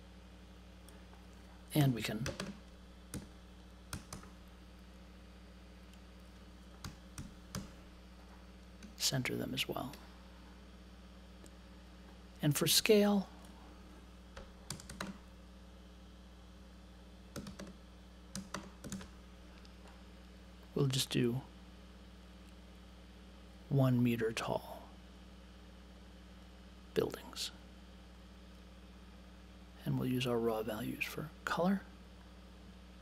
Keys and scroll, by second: 1.8-4.6 typing, 6.5-8.0 typing, 14.4-15.3 typing, 17.4-18.9 typing.